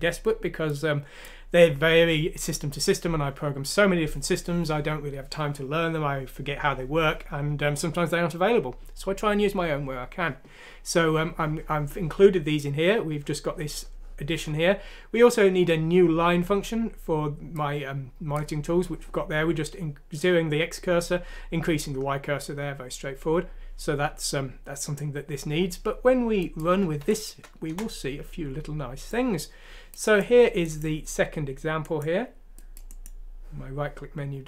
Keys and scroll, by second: 27.0 F6, 27.7 Return.